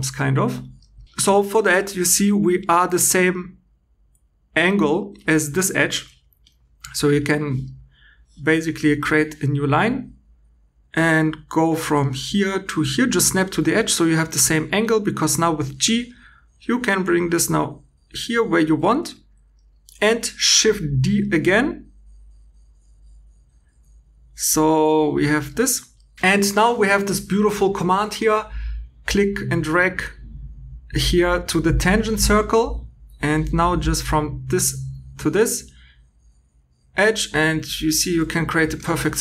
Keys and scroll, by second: 5.3 2, 14.3 g, 21.0 shift+d.